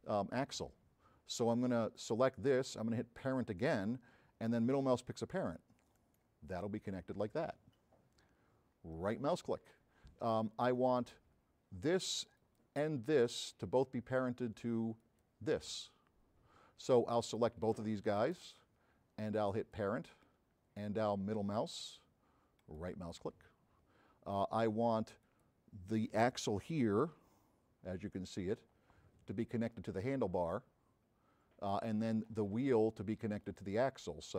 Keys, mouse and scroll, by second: 2.0 click, 3.3 click, 6.0 middle click, 9.0 right click, 10.8 click, 12.4 click, 15.1 click, 17.3 drag, 18.1 shift+click, 19.6 click, 21.6 middle click, 22.6 right click, 24.0 middle click, 25.3 click, 27.1 f, 27.7 middle click, 28.2 middle click, 28.4 middle click, 28.8 middle click, 29.8 click, 32.3 click, 33.5-34.3 drag.